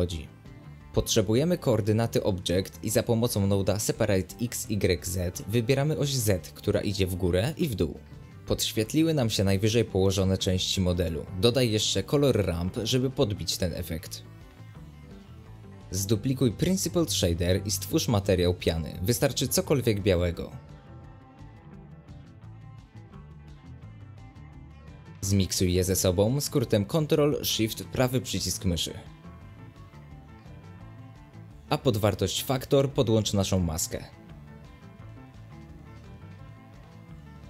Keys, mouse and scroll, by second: 1.4 shift+a, 2.1 ctrl+shift+click, 2.4 ctrl+shift+click, 4.8-8.9 middle drag, 8.9 shift+a, 9.2-10.1 middle drag, 10.1-11.8 drag, 11.8 scroll down 1, 12.2 middle click, 12.5 space, 13.2 click, 15.4 space, 16.0 click, 17.4 click, 17.6 middle click, 17.9 shift+d, 21.3 ctrl+shift+click, 21.6 middle click, 22.3 click, 22.9 middle click, 23.5 click, 24.1 scroll down 1, 24.2-28.0 middle drag, 28.0 click, 29.8-31.0 ctrl+shift+right drag, 31.0-32.9 drag, 36.7 click.